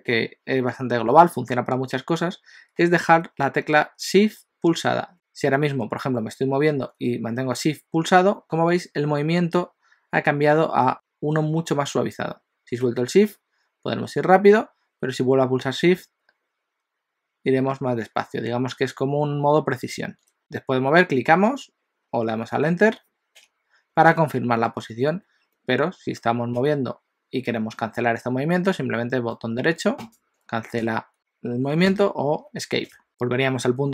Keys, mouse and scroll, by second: 26.6 g, 32.0 g.